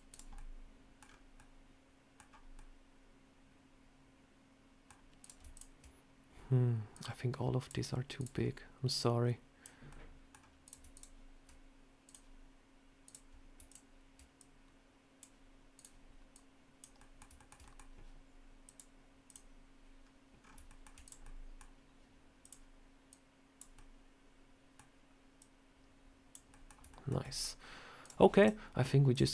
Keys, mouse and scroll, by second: 0.0 click, 0.2 middle click, 0.9 scroll down 4, 1.2 middle click, 2.4 middle click, 5.1 click, 5.4 shift+click, 6.8 click, 8.0 click, 8.2 shift+click, 8.2 scroll up 1, 8.8 click, 9.7 middle click, 10.3 scroll down 1, 10.5 click, 10.8 shift+click, 10.8 shift+click, 11.9 click, 12.9 click, 13.0 shift+click, 13.5 shift+click, 14.2 click, 15.6 click, 16.2 click, 16.3 shift+click, 16.8 middle click, 17.2 shift+middle click, 17.5 middle click, 18.5 click, 19.9 scroll down 1, 20.3 scroll up 3, 20.5 shift+middle click, 20.9 click, 21.1 middle click, 22.3 click, 22.9 click, 23.6 middle click, 25.2 click, 26.3 middle click, 26.7 shift+middle click, 27.1 middle click, 27.9 click, 28.2 click, 29.0 click.